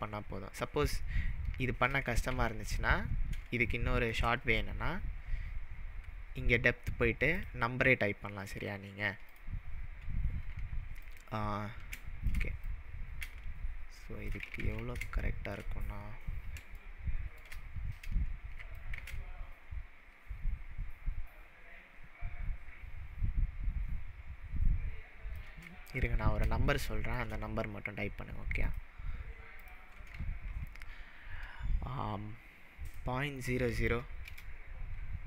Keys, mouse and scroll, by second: 2.3 ctrl+z, 3.7-4.2 shift+middle drag, 7.4-9.4 drag, 11.0-12.6 alt+drag, 11.0-12.2 alt+middle drag, 12.6-14.5 drag, 14.7 ctrl+z, 15.6 shift+middle drag, 15.7-16.5 scroll down 3, 16.9-17.3 shift+middle drag, 18.8-19.3 alt+drag, 26.0-26.4 scroll up 3, 26.8-27.3 shift+middle drag, 28.6-31.7 drag, 30.6 0, 32.9 click.